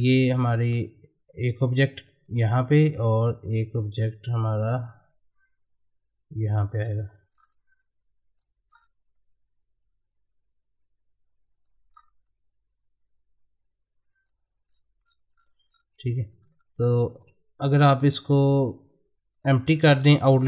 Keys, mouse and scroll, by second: 0.5-1.3 scroll down 1, 2.1-6.7 drag, 6.7 right click, 7.3-7.8 scroll up 1, 7.8 click, 8.7-9.1 scroll up 1, 9.1-11.9 drag, 11.9-12.2 scroll up 1, 12.2-14.7 drag, 14.7 scroll down 1, 16.3 click, 16.4 middle click, 16.9 click, 17.1 click, 19.3 click, 20.0 right click.